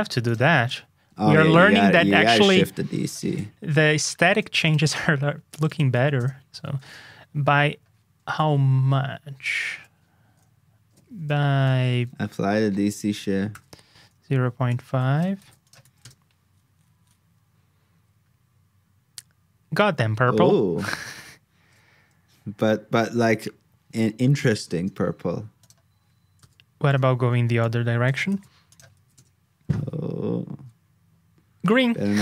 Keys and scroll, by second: 3.5 alt+shift+Down, 5.8 super+v, 6.8 super+Tab, 11.6 super+Tab, 15.4 super+c, 15.8 super+v, 28.2 super+c, 28.9 super+v.